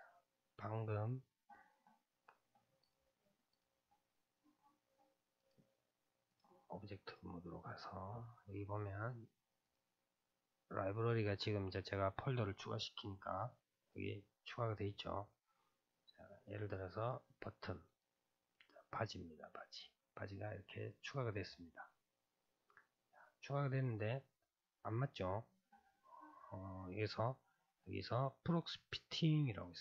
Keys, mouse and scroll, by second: 1.6-2.4 scroll down 1, 2.8 click, 3.5 click, 4.1-5.4 middle drag, 5.4-7.1 drag, 9.6-12.7 drag, 13.9 click, 20.2-21.8 middle drag, 21.8-22.4 scroll up 2, 22.4-26.8 middle drag, 29.5-29.8 drag.